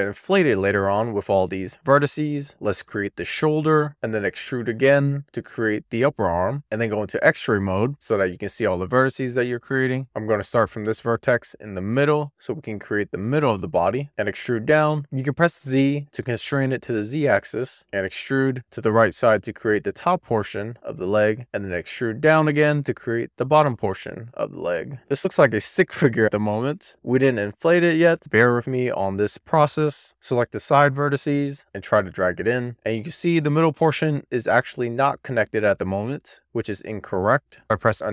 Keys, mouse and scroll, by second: 2.5 d, 3.8 d, 6.1 click, 7.1 alt+z, 10.3 d, 15.0 z, 17.6 click, 17.7 z, 18.1 d, 20.5 click, 20.7 x, 21.6 d, 24.8 click, 24.8 alt+z, 30.0 alt+click, 31.1 click, 32.2 click, 33.5 z, 34.4 super+z, 34.7 middle click, 35.3 alt+middle click, 36.9-37.5 scroll up 3, 37.8-38.1 scroll up 4.